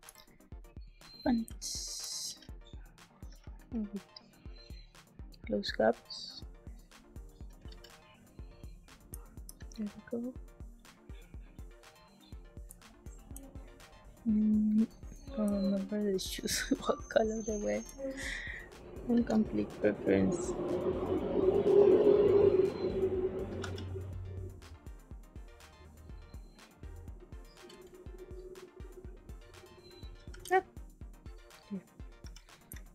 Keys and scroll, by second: 1.4 space, 2.2 g, 3.2 z, 3.5 b, 7.6 g, 9.0 space, 9.5 b, 12.6 space, 15.4 space, 19.0 b, 23.5 z, 27.6 g, 30.2 z, 32.1 z, 32.6 space.